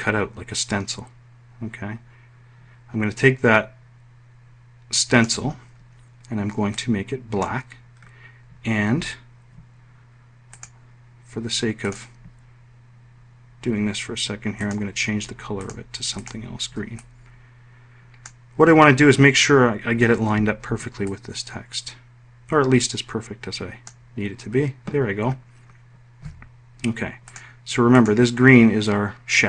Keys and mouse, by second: 10.2 click, 11.5 click, 14.3 click, 15.3 click, 15.8 click, 16.6-18.0 ctrl+drag, 20.7-22.5 ctrl+drag.